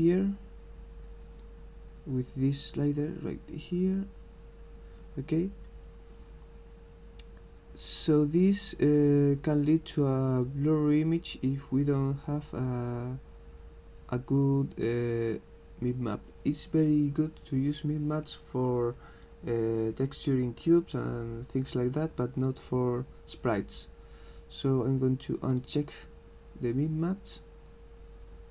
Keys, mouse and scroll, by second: 2.8-19.2 drag, 25.5 click.